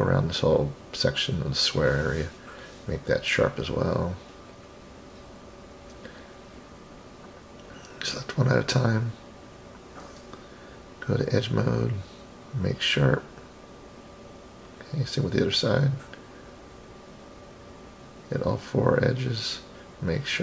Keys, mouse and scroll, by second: 1.3 shift+click, 1.5 shift+click, 1.9-2.5 scroll down 1, 2.5-2.9 scroll down 2, 2.9-3.9 scroll up 3, 3.9 click, 4.1 click, 5.0 click, 5.2 click, 5.7 click, 6.1 click, 7.1 shift+click, 8.1 shift+click, 9.0 shift+click, 13.3 right click, 13.7 click, 14.0-14.6 scroll down 1, 14.6 scroll down 2, 14.7 middle click, 15.7 click, 16.7 shift+click, 17.6 shift+click, 18.4 shift+click, 19.5-20.4 right drag.